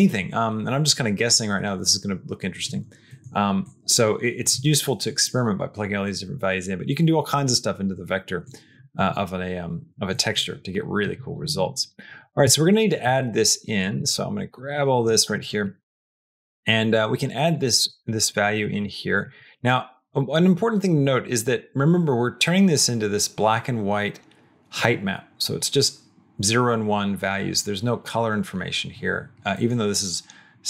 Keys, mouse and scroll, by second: 3.0 middle click, 3.5 click, 8.3 click, 10.0 middle click, 11.3 middle click, 12.0 click, 12.7 shift+click, 13.0 shift+middle click, 13.6 shift+click, 15.0 middle click, 15.5 middle click, 15.9 click, 16.0 ↻, 16.2 click, 17.7 click, 18.7 middle click, 19.1 middle click, 29.4 middle click.